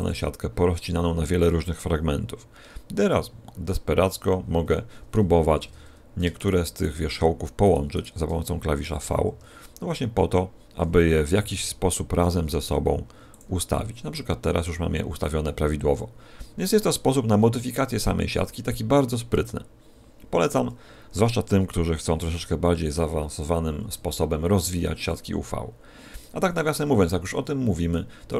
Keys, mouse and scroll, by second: 6.3 shift+right click, 6.7 shift+right click, 7.6 shift+right click, 7.9 shift+right click, 9.0 v, 13.3 click, 23.9 a, 26.2 a, 27.0 middle click, 28.2 middle click.